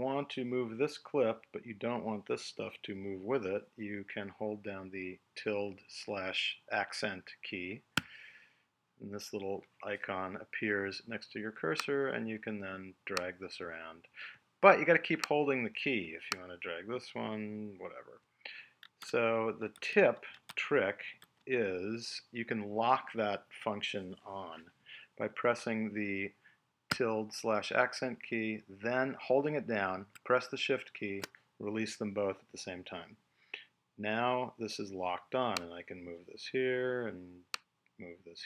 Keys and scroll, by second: 19.0 super+z.